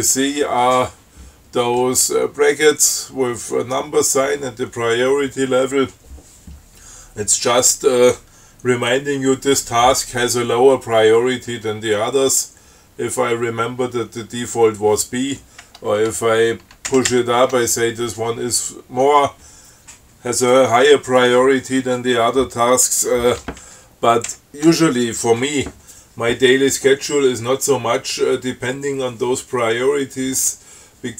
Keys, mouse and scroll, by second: 0.2 shift+Up, 17.2 shift+Up, 24.5 shift+Up.